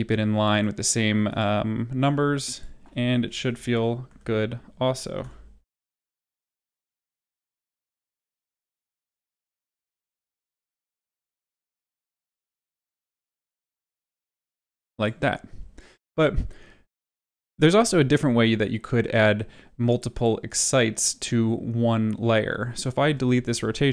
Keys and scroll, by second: 1.5-5.1 typing, 6.9 0, 7.1 Return, 9.0 1, 9.5 0, 9.7 Return, 10.9 space, 22.9 ctrl+z.